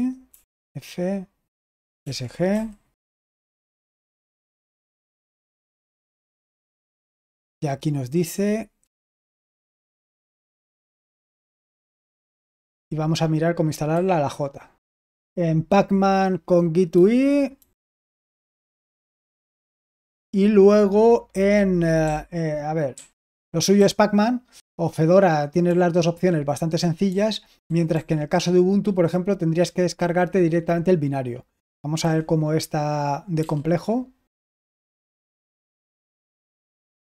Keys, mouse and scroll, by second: 0.2 typing, 1.9-2.4 typing, 9.6-11.3 typing, 12.5 typing, 13.8 typing, 16.8-18.8 typing, 21.9-23.7 typing, 25.5 j, 27.5-27.8 typing, 31.9 typing, 33.3 typing, 35.5 typing, 36.7 typing.